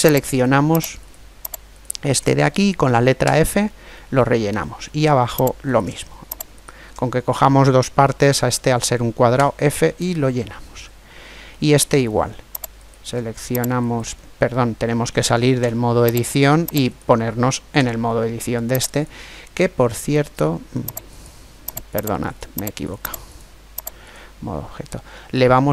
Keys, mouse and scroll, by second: 0.1-3.2 right drag, 3.0 f, 3.3 right click, 3.7-5.4 middle drag, 5.4-8.2 right drag, 9.1 f, 9.8-12.3 middle drag, 12.5-15.4 right drag, 14.3-15.4 middle drag, 15.4 Tab, 15.6 middle click, 16.6 right click, 17.5 Tab, 20.9 right click, 23.0 click.